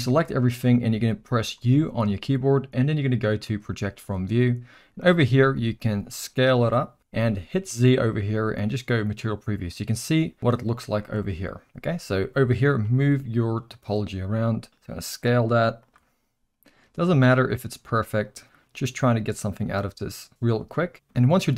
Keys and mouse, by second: 0.0 ctrl+z, 0.0-0.6 drag, 1.5 u, 4.8-5.1 drag, 5.5 s, 8.0 z, 11.2 middle click, 12.8 g, 14.7 s, 16.0 g, 17.6 r, 18.6 g.